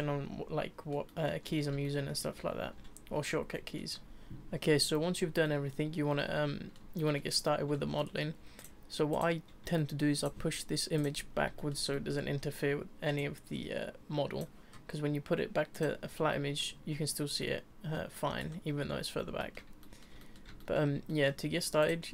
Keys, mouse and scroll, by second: 1.5-1.8 scroll down 2, 1.8-2.9 shift+middle drag, 2.9-3.5 scroll up 2, 3.5-4.3 shift+middle drag, 5.4-8.6 middle drag, 8.6 click, 9.1 click, 9.7-10.2 shift+middle drag, 10.2 click, 10.9 click, 11.5-13.2 shift+middle drag, 13.2 click, 15.7 click, 16.3-18.4 shift+middle drag, 18.4 scroll down 5, 19.4-21.8 middle drag, 21.8 click.